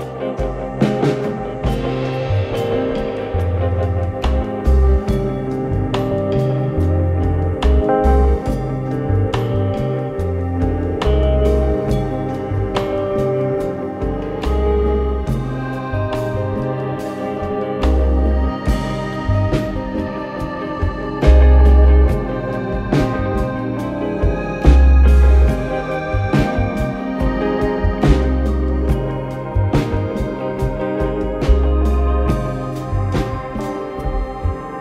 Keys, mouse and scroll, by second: 0.4-1.4 typing, 1.5 Return, 3.3 click, 3.5 click, 4.0-7.9 typing, 6.5 Tab, 7.5 Tab, 8.3 Return, 10.7 click, 12.2 click, 15.2 click, 16.2 click, 17.1 click, 18.7 click, 20.8 click, 21.9 click, 24.4 click, 25.4 click, 30.2 alt+middle click, 31.1 click, 32.9 click, 33.5 click, 34.1 scroll.